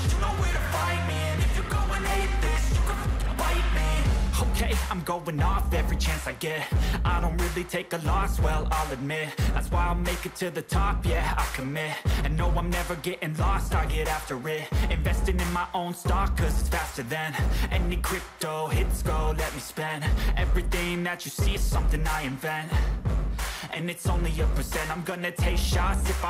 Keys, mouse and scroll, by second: 11.0 click, 17.7 g, 19.3 BackSpace, 20.6 0, 21.1 5, 21.5 5, 22.2 ctrl+a, 24.9 scroll up 3.